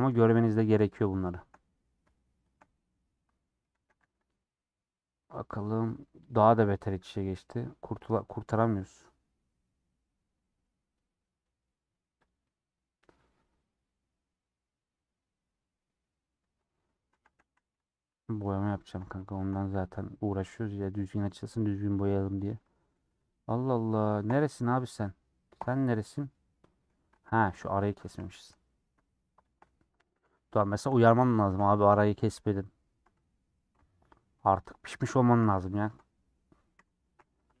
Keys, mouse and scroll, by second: 0.6 shift+click, 0.8-2.5 middle drag, 2.5 shift+click, 2.9 middle click, 3.7 a, 4.0 u, 6.8 j, 6.9-8.5 drag, 8.5 middle click, 9.3 scroll down 2, 9.5-12.1 middle drag, 12.1 click, 12.4-17.2 middle drag, 17.2 a, 18.1 middle click, 18.9 scroll up 2, 19.1-22.2 middle drag, 22.2 scroll down 1, 22.4 middle click, 23.2 click, 24.2 k, 25.5 l, 26.1-27.2 middle drag, 27.3 click, 27.6 middle click, 28.6 middle click, 29.7-30.8 middle drag, 30.8 shift+click, 31.4 a, 31.7 u, 34.6 middle click, 35.4 /, 35.8 Tab, 36.7 /, 37.2-37.6 scroll down 11.